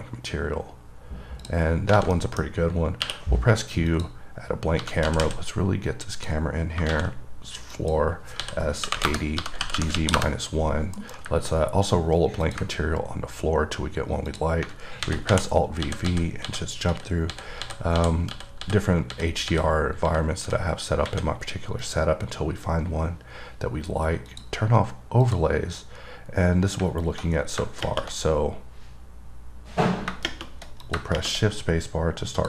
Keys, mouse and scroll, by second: 1.0-1.7 scroll up 1, 1.7 click, 2.0 scroll down 2, 2.4 middle click, 3.0-4.2 scroll down 1, 4.2 click, 4.9 scroll up 2, 6.4 click, 6.8 scroll down 2, 8.0 click, 12.7 click, 13.0-13.9 scroll up 4, 13.9-14.5 scroll down 1, 14.5 click, 22.1 click, 24.6 click, 25.5 click, 26.0-26.6 scroll up 1, 26.6-27.1 scroll up 2, 31.1 click.